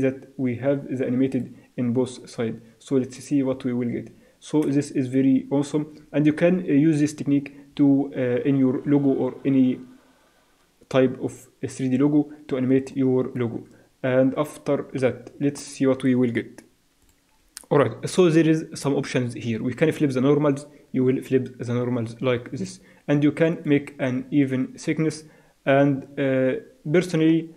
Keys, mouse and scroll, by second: 2.5 click, 13.1-14.7 drag, 19.9-21.7 drag, 22.6-25.1 drag.